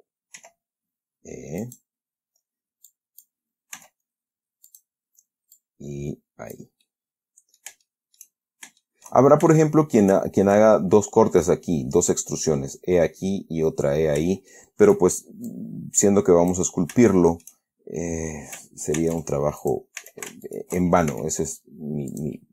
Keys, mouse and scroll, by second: 0.7 e, 1.9 click, 3.2 click, 4.1 s, 5.0 click, 5.9-7.1 drag, 7.2 middle click, 8.2 shift+middle click, 9.1 shift+middle click, 9.8 shift+middle click, 14.8 shift+middle click, 15.2 shift+scroll up 2, 15.4 shift+middle click, 15.8-17.0 drag, 17.4 shift+middle click, 18.3-18.7 scroll up 2, 19.3 ctrl+Tab, 19.9 ctrl+click, 20.3 a, 20.8 alt+shift+right click, 21.4 alt+shift+s, 22.4 click.